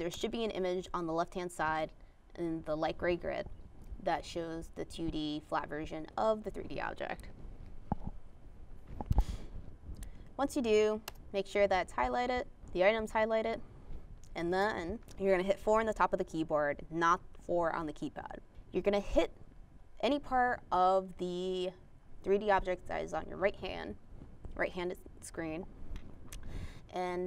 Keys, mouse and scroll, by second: 6.8 drag, 7.6 click, 8.0 middle click, 8.5 middle click, 9.7 click, 11.1 4, 12.0 click, 14.1 click.